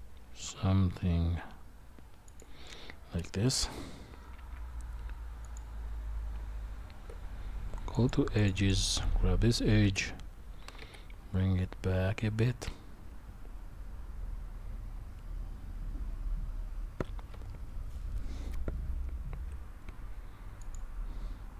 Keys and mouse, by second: 6.3 Tab, 8.0 click, 8.4 alt+shift+click, 8.5 alt+shift+click, 9.8 g.